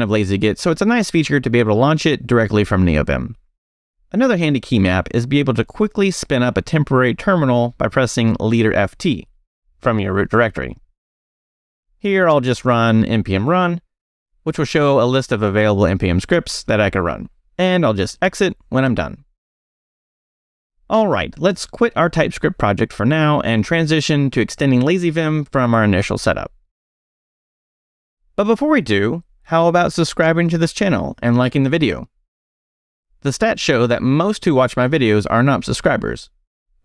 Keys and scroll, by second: 0.0-4.5 typing, 7.2 space, 8.7 f, 10.0 t, 11.8-13.3 typing, 18.1-19.3 typing, 23.4 Escape, 23.9 shift+Escape, 24.0 shift+;, 24.5 shift+q, 25.1 q, 25.5 a.